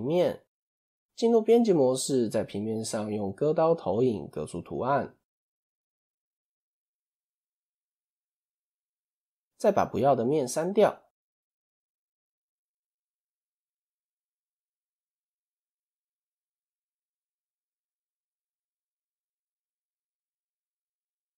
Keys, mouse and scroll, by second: 0.3 Tab, 0.7-2.6 scroll down 2, 2.6-6.7 drag, 7.2 click, 7.5-8.1 scroll up 2, 8.1-8.4 scroll up 1, 8.4 1, 8.8 scroll down 3, 9.0 shift+middle click, 9.7-10.0 scroll up 3, 10.2 shift+middle click, 10.9 3, 11.3 shift+middle click, 11.5-12.0 shift+scroll up 1, 12.0 click, 15.1-17.4 drag, 17.4-17.8 scroll down 2, 17.9 x, 19.5 click, 21.0-21.3 drag.